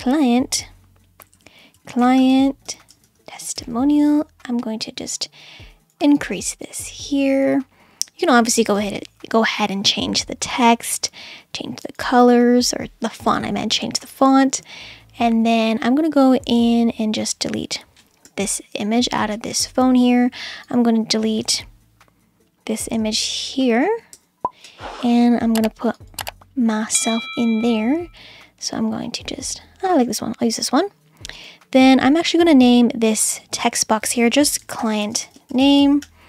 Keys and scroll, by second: 1.2 Left, 1.5-3.6 typing, 18.3 BackSpace, 24.1 BackSpace, 34.3-36.2 typing.